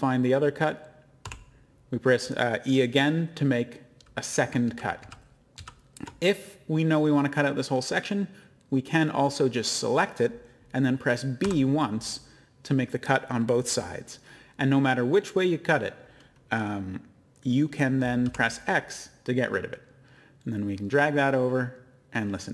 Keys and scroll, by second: 1.2 e, 4.6 ctrl+z, 5.0 ctrl+z, 5.5 ctrl+z, 11.4 b.